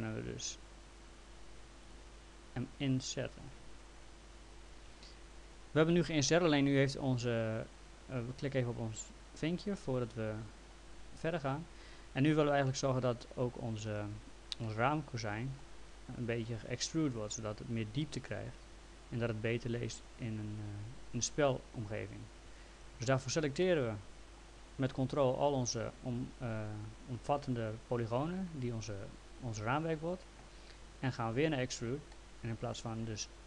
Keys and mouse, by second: 1.8 right click, 2.8 click, 9.6 click, 14.6 alt+middle click, 16.2 click, 17.2 ctrl+click, 19.0 ctrl+click, 19.9 ctrl+click, 23.1 ctrl+z, 23.6 alt+middle click, 31.5 click, 32.1 alt+middle click.